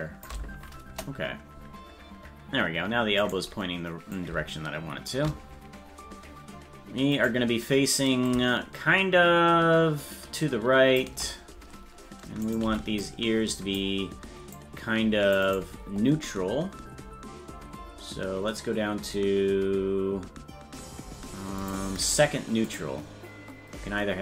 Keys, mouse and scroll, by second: 0.9 KP_0, 3.3 right click, 4.1 click, 7.2 right click, 8.3-11.0 drag, 12.6 right click, 13.3 c, 18.2-18.5 scroll down 1, 21.6 click, 21.6 scroll down 14, 22.7 click, 23.8-24.2 scroll up 10.